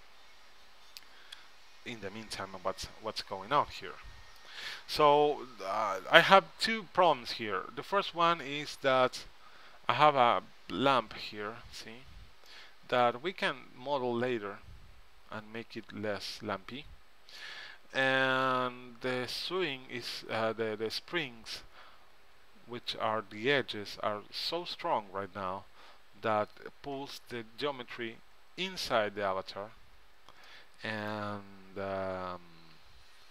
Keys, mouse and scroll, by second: 0.4-1.5 middle drag, 6.2-8.2 middle drag, 14.6-15.8 middle drag, 19.5-20.6 middle drag, 32.6-33.3 middle drag.